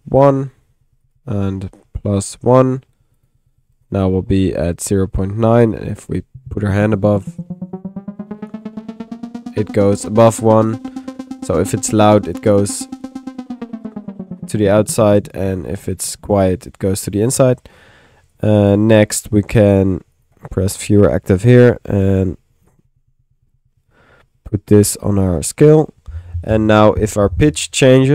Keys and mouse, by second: 4.1-18.3 middle drag, 4.1 1, 18.3 click, 20.2 click, 21.4 click, 22.7-28.1 drag.